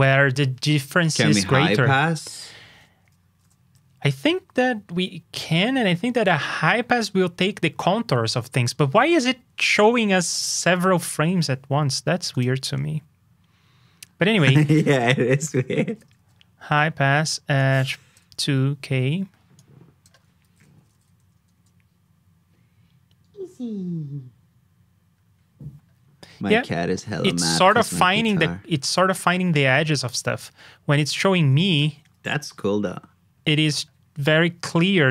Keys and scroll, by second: 3.4 super+j, 20.4 super+c, 20.7 super+j.